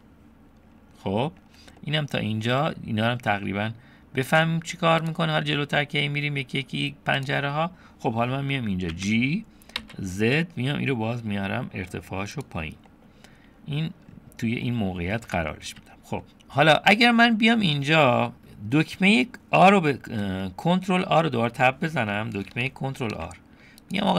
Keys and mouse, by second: 1.8 middle click, 4.3-6.4 drag, 7.2 click, 8.9 g, 12.9 click, 15.7 Tab, 16.2 click, 19.8-20.4 drag, 21.5 Tab, 23.1 ctrl+r.